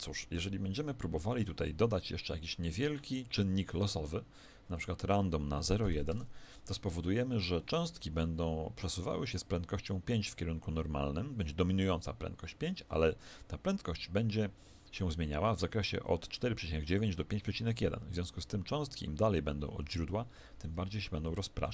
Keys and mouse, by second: 4.6 click.